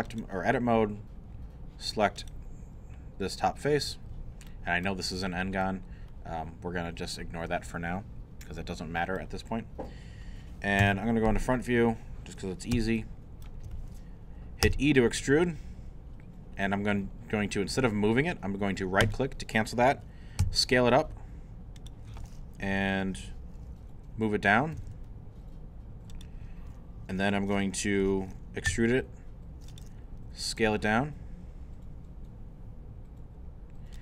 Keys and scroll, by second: 10.8 i, 14.6 shift+e, 20.4 s, 24.5-25.4 typing, 28.7 e, 30.6 s.